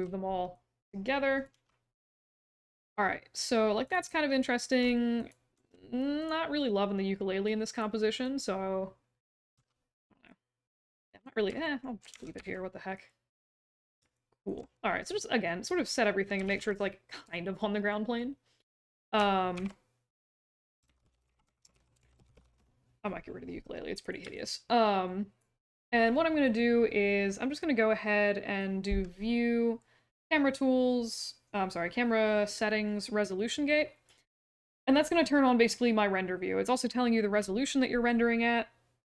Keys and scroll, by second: 1.5 w, 5.5 w, 9.5 e, 12.1 w, 16.4 ctrl+z, 19.5 ctrl+s, 20.6-22.9 typing.